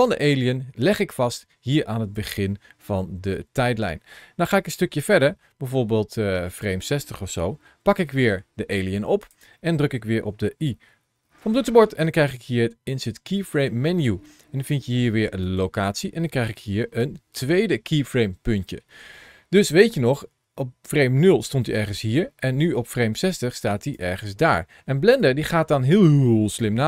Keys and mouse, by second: 4.8-6.4 drag, 7.7 g, 9.0 click, 11.2 i, 16.6 ctrl+shift+a, 16.6 shift+c, 25.0-26.4 drag.